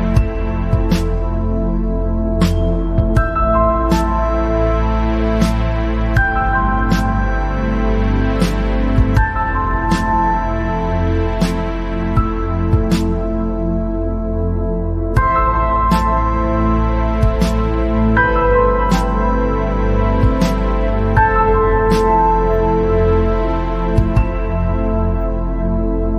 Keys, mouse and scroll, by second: 1.0 s, 3.9-4.5 scroll down 10, 4.9 click, 8.3-10.6 drag, 13.1 click, 13.6 scroll up 3, 13.9 scroll down 3, 14.1-15.2 middle drag, 15.2 click, 16.7 click, 24.6 click, 24.9-25.3 scroll up 5, 25.3 scroll down 3, 25.4-26.1 middle drag.